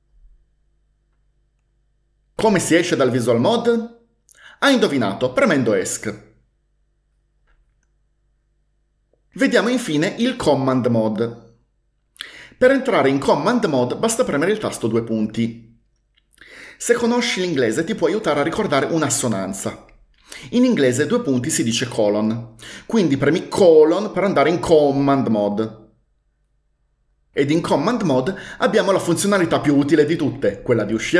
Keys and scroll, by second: 6.0 Escape, 6.1 Escape, 6.2 Escape, 15.3 shift+;.